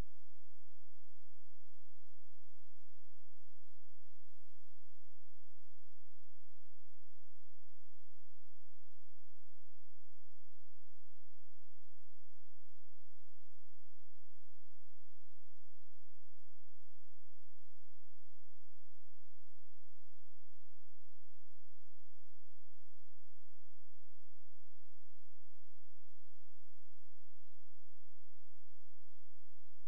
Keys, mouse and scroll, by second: 2.6-3.5 scroll up 1, 3.5 click, 22.3 scroll down 1, 22.5-23.6 scroll up 1, 23.6 click, 26.3 scroll down 1, 26.6 scroll up 1, 28.0 click.